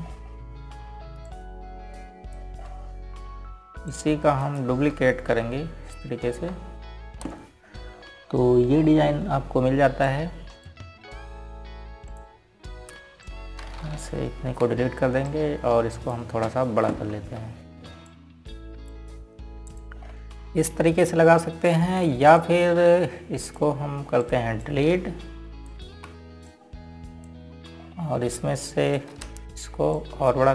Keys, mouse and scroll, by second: 0.6 click, 1.6-2.9 scroll up 1, 2.9 click, 4.3 scroll up 1, 5.6 click, 6.1 ctrl+right click, 7.0 ctrl+r, 7.5-8.8 typing, 9.3 scroll up 1, 10.4 scroll down 1, 11.7 click, 16.2 Delete, 16.9 click, 18.5 ctrl+g, 19.7 click, 21.7 scroll down 1, 24.0 click, 27.6 Delete, 28.1 click, 29.5 scroll up 1, 30.3 click.